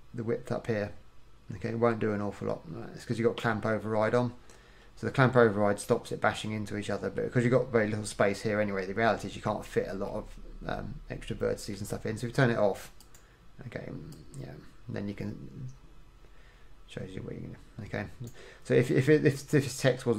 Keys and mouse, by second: 6.4 middle click, 9.3 middle click, 19.1 middle click.